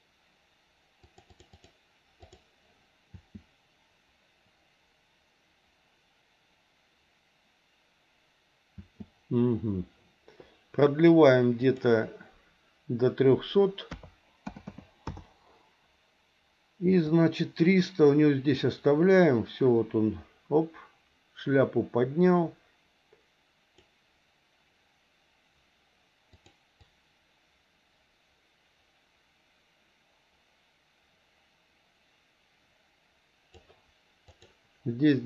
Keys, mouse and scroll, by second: 1.0 click, 1.5 click, 2.2 click, 3.1 space, 8.7 space, 11.6-15.1 drag, 14.6 KP_0, 17.1-23.9 drag, 26.4 click, 26.9-33.6 drag, 34.3 click.